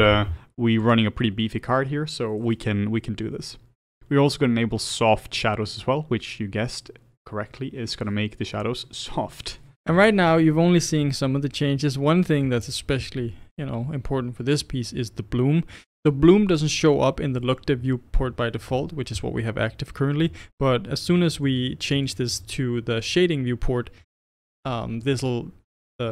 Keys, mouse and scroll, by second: 21.0 click, 21.4 click, 22.3 click, 24.9 click.